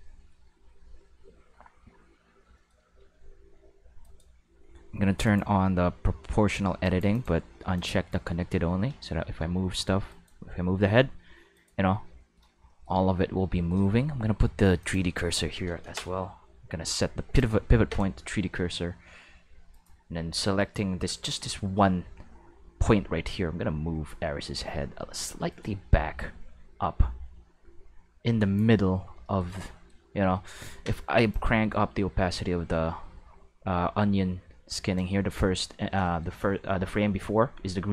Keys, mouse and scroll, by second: 3.0 g, 4.0 right click, 5.2 click, 6.8 click, 7.1 click, 7.7 click, 8.8 g, 10.1 right click, 10.5 g, 11.5 right click, 12.7 shift+middle click, 13.6 shift+middle click, 14.8 click, 16.5 ., 17.4 click, 19.0 r, 19.7 right click, 20.6 right click, 21.0 right click, 23.0 r, 25.5 right click, 26.0 r, 28.4 click, 31.3-34.9 drag, 35.4-35.9 shift+middle drag.